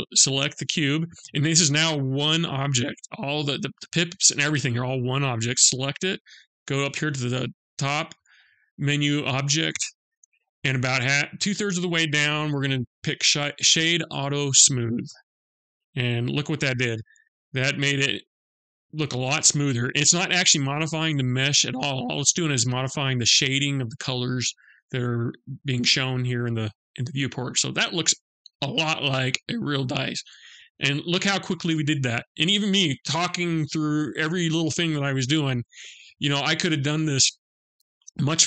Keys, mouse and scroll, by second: 8.9 click, 15.7 middle click, 16.7-17.0 scroll up 2, 17.5-18.0 scroll up 2, 18.0 scroll up 1, 18.1 middle click, 18.8-20.1 scroll down 7, 20.1 middle click, 24.7-25.5 scroll down 1, 25.5 scroll down 1, 25.7 middle click, 27.1-27.7 scroll up 2, 27.7-29.2 scroll up 2, 29.2 middle click, 30.9-31.8 scroll down 4, 31.9 middle click.